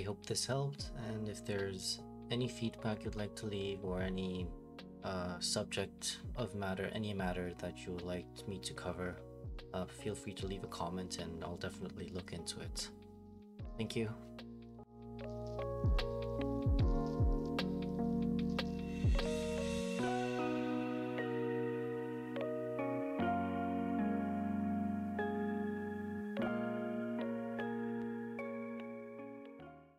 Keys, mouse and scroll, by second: 7.6 Escape, 9.7 click, 10.3 click.